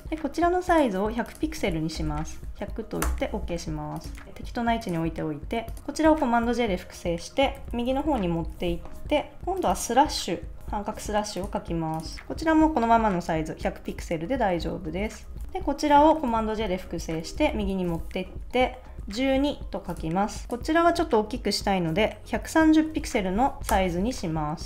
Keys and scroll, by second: 0.1 space, 1.6 1, 1.9 0, 3.0 Return, 4.2 super+s, 6.0 super+j, 7.5 shift+Right, 10.6 /, 14.5 Left, 15.4 super+s, 16.3 super+j, 17.0 shift+Right, 18.8-19.7 typing, 22.8 1, 23.1 0, 23.7 Return.